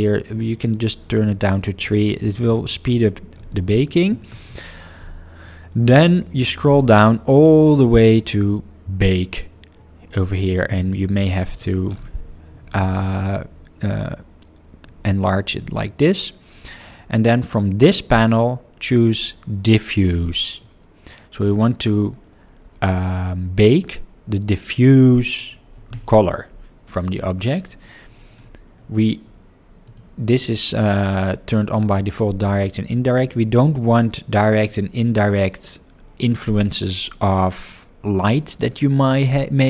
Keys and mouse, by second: 10.3 click, 11.4 click, 17.4-20.8 drag, 29.8 click, 30.2 click, 34.6 click, 38.5 click.